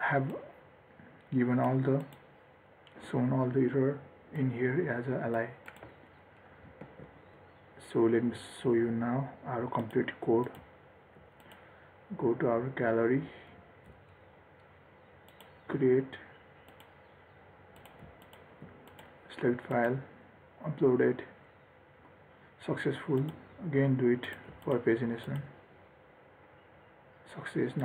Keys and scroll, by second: 7.2 ctrl+s, 13.9 ctrl+r.